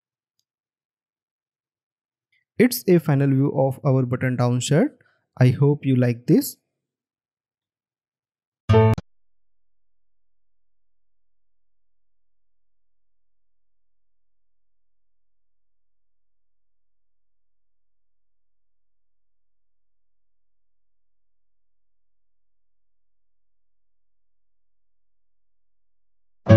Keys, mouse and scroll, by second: 1.9 alt+scroll up 1.